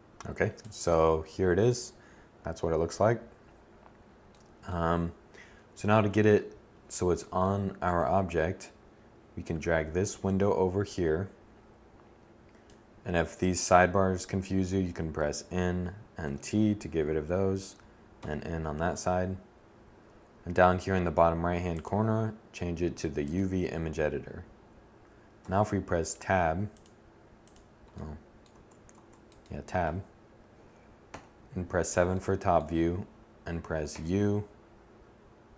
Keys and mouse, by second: 3.5-8.5 middle drag, 5.5 7, 14.4 n, 15.4 t, 17.3 n, 24.6 Tab, 27.7 Tab, 28.1 Tab, 30.2 7, 33.1 u.